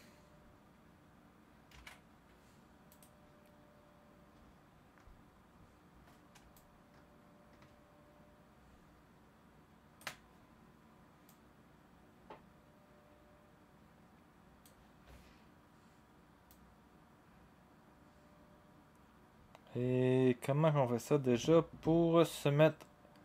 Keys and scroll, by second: 1.7 ctrl+d.